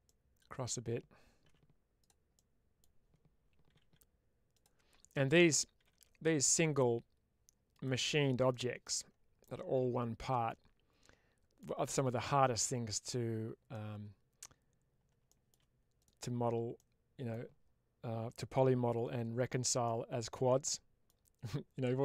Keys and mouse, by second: 1.3 1, 1.9 click, 2.2 middle click, 4.4 click, 5.2 click, 7.6 click, 8.4 middle click, 9.3-11.5 middle drag, 13.6 middle click, 15.9 click, 16.6 middle click, 19.7-22.0 middle drag.